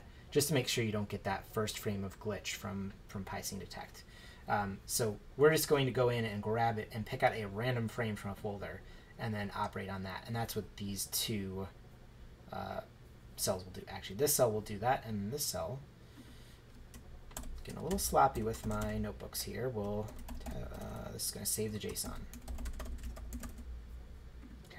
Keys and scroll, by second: 17.4-18.8 typing, 19.8-24.0 typing.